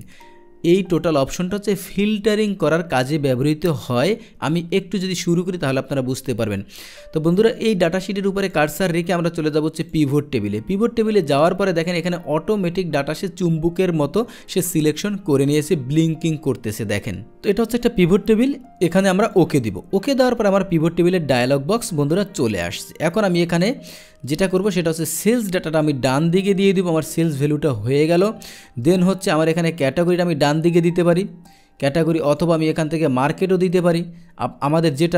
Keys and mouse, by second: 8.4 click, 9.8 click, 19.2 click, 24.6-25.8 drag, 29.5 click, 31.9 click, 33.2 click.